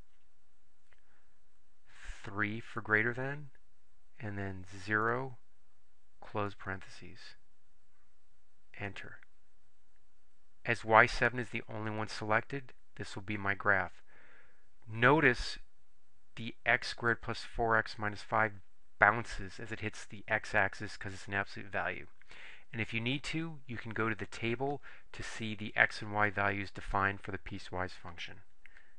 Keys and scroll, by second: 2.8 3, 5.1 0, 6.5 ), 8.9 Return.